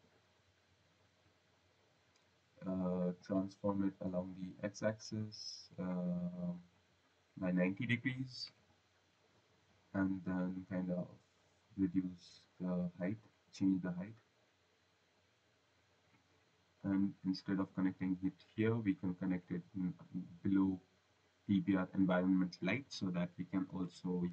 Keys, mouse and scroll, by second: 0.0 click, 4.7-6.6 scroll, 7.2 click, 8.3-9.0 typing, 12.0 click, 13.2 click, 17.7 right click, 19.1 click, 21.9 click, 23.5-24.3 typing.